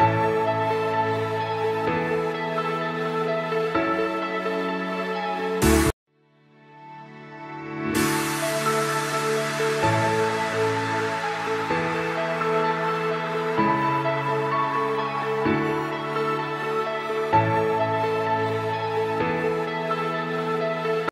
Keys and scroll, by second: 1.4 ctrl+shift+a, 7.0 space, 7.6 c, 7.9 Escape, 8.9 ctrl+shift+a, 14.2 ctrl+g, 14.5-15.4 typing, 16.3 F3, 17.5 F3, 17.7 Escape, 19.3 shift+F2.